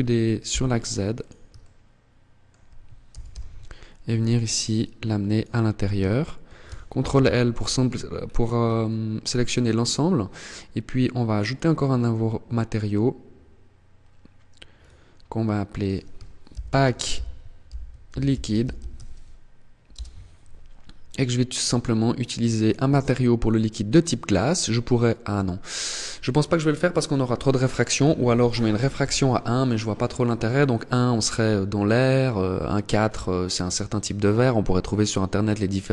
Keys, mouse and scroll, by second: 0.6 click, 0.8 shift+middle click, 2.4 g, 4.7 click, 5.2 shift+middle click, 6.4 ctrl+l, 6.6-7.0 scroll down 3, 7.4 scroll down 4, 7.8-8.2 scroll up 5, 9.0 scroll down 1, 10.6 click, 13.9 click, 14.9 click, 20.2 click, 27.1 click.